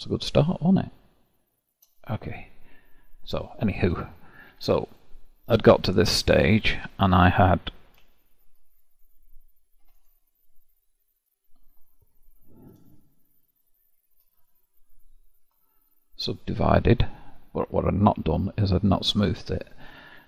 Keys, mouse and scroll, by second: 2.1-3.7 scroll up 1, 3.7 scroll up 1, 3.8-4.8 middle drag, 4.8 click, 5.7 Tab, 6.2-8.7 middle drag, 8.7-9.8 drag, 9.8 2, 9.9-11.2 drag, 13.5-15.1 shift+drag, 15.8-17.6 right drag, 17.6-20.2 middle drag.